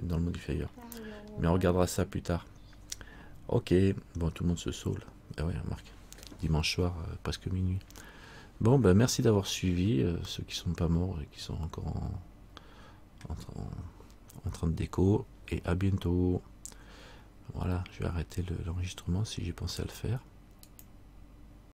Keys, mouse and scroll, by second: 0.1 middle click, 1.5-1.9 scroll down 1, 1.9-3.1 scroll up 2, 3.1-4.1 scroll up 1, 10.5 middle click.